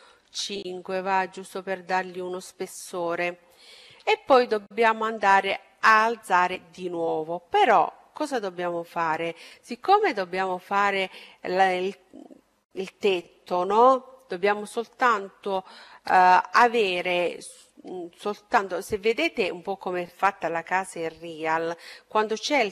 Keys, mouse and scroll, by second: 4.3-6.2 middle drag.